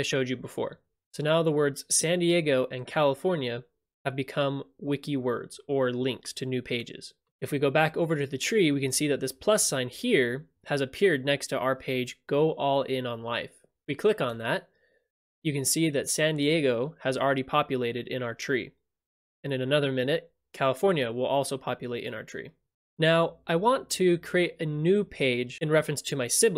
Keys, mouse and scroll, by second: 1.1 click, 14.4-15.4 drag.